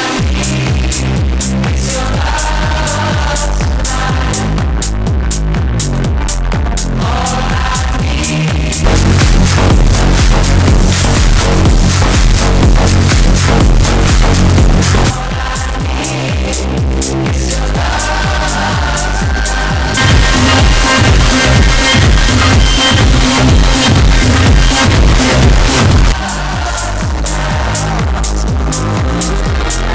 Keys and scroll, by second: 15.1 Page_Down, 26.0 Page_Down.